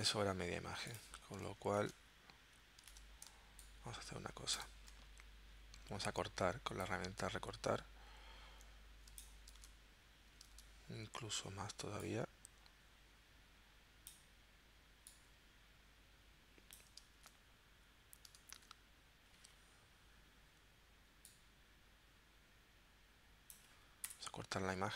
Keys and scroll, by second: 1.9 super+Tab, 3.0 super+Tab, 3.3 space, 9.6 super+Tab, 10.5 super+Tab, 17.2 super+Tab, 18.6 super+Tab, 24.1 Return.